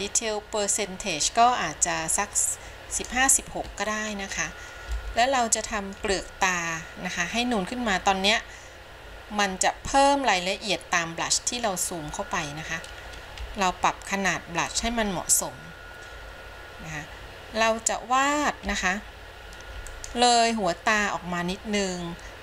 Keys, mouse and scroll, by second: 4.2 scroll up 1, 5.1-6.2 shift+middle drag, 11.8 scroll up 1, 13.5 f, 15.8 scroll down 1, 18.8 f.